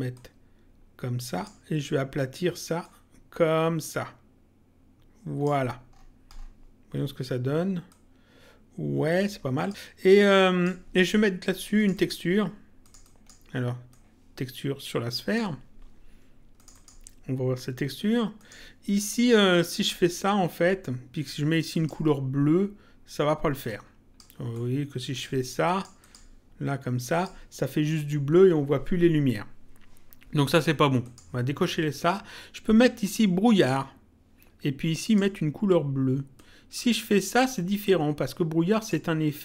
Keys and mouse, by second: 0.1 click, 2.7 click, 7.8 click, 10.1 click, 11.8 click, 16.6 click, 18.4 click, 21.7 click, 23.7 click, 25.7 click, 31.1 click, 33.5 click, 35.0 click, 36.3 click.